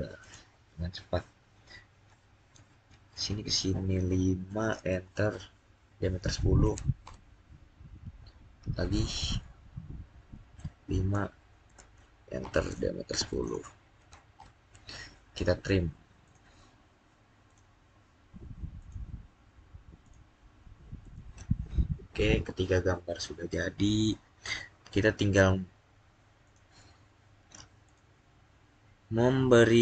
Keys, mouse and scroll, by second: 0.1 click, 2.0-3.8 scroll up 1, 4.4-4.9 scroll up 1, 4.9 Return, 5.7-6.5 typing, 6.9 Return, 9.0 click, 11.5 click, 12.3 Return, 13.0-13.8 typing, 14.2 Return, 16.1 click, 21.5 scroll up 1, 23.4 middle click, 24.2-25.9 scroll up 1, 26.3 click.